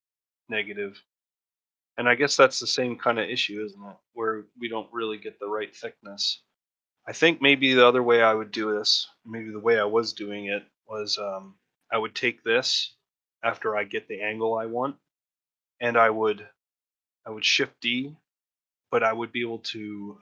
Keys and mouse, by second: 3.3 shift+click, 5.8 shift+middle click, 11.7 click, 12.6 shift+middle click, 12.6 typing, 14.7 shift+middle click.